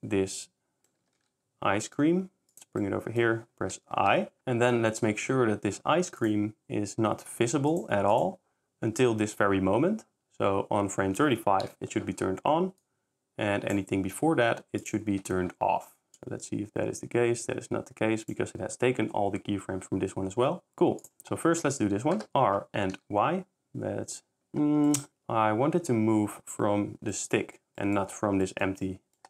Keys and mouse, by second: 1.0 g, 1.2 y, 4.0 i, 7.7 click, 8.1 click, 12.8 click, 14.8 click, 16.2 click, 21.0 click, 22.5 r, 23.0 y, 24.8 s, 27.8 middle click, 28.3 s, 28.8 middle drag.